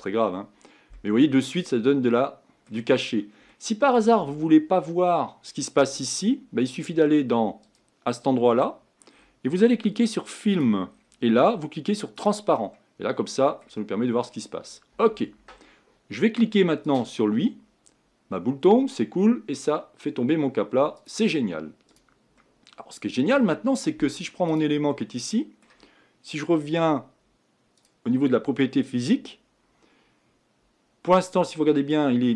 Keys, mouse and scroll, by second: 0.9-3.0 middle drag, 3.0-3.5 scroll up 3, 3.5 middle click, 4.3-5.6 scroll down 3, 7.6-9.1 scroll down 1, 9.1-10.6 scroll down 1, 10.6-11.0 scroll down 1, 12.2 click, 12.7-13.9 middle drag, 13.9-14.2 scroll up 3, 14.5-15.9 scroll down 1, 17.0-22.4 drag, 22.4-23.6 middle drag, 23.6-24.6 scroll down 3, 24.6 click, 24.9-31.9 middle drag, 31.9-32.3 drag.